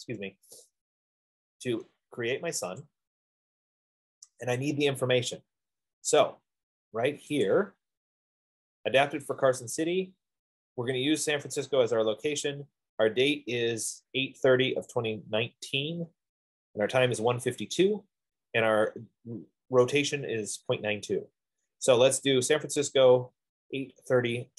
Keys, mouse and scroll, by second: 3.2-4.5 drag, 6.6 click, 8.0 click, 11.1 F15.